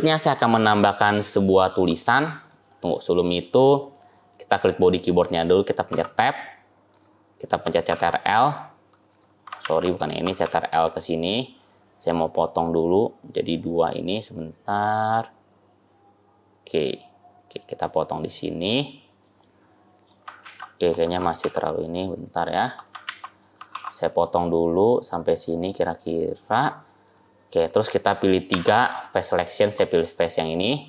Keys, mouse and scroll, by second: 0.8 shift+scroll up 1, 0.8 shift+middle click, 2.4 middle click, 4.5 click, 5.0 middle click, 5.8 Tab, 6.8 click, 7.8 ctrl+r, 9.5 ctrl+z, 10.3 ctrl+r, 19.1 middle click, 20.3 ctrl+z, 21.2 ctrl+r, 26.9 click, 28.4 3, 28.7 click, 29.2 shift+click, 30.0 shift+middle click.